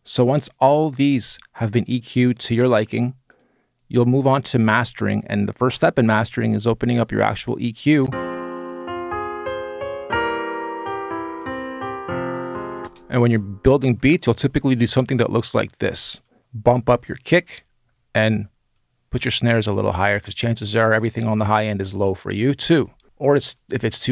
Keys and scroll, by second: 7.8 space, 12.6 space.